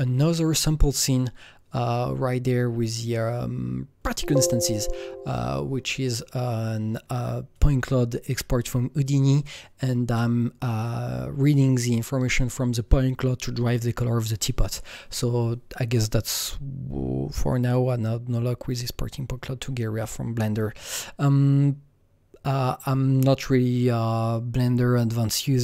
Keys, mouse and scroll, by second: 1.0 click, 4.0 click, 5.3 click, 7.6 click, 9.0 click, 9.8-11.7 scroll down 3.